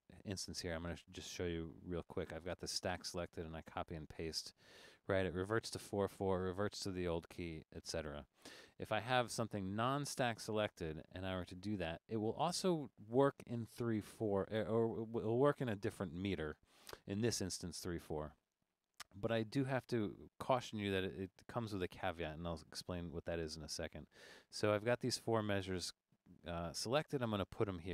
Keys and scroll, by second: 7.7 super+z.